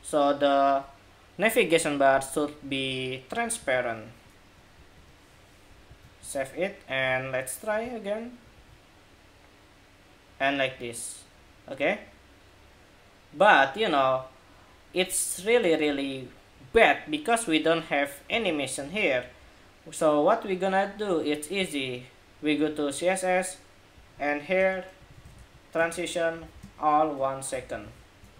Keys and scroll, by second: 5.6 super+s, 6.0 super+Tab, 6.8 super+Tab, 7.5 super+Tab, 8.3 super+r, 18.2 super+Tab, 27.5 super+s, 28.0 super+Tab.